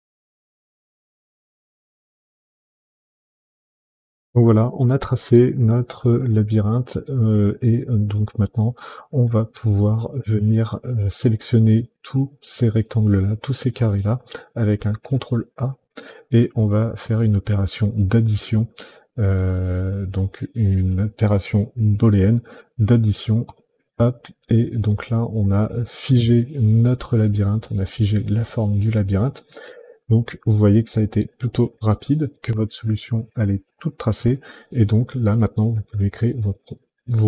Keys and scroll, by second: 0.2 Delete, 0.6 Delete, 0.7 Delete, 1.3 Delete, 1.8 Delete, 2.3 Delete, 2.8 Delete, 3.4 Delete, 3.9 Delete, 14.7 ctrl+a.